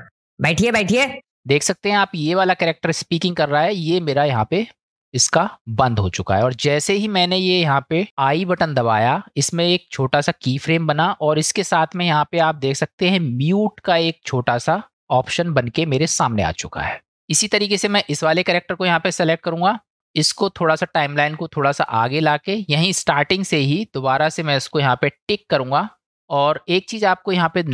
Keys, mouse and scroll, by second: 1.2 space, 18.1 click, 20.0-22.1 drag.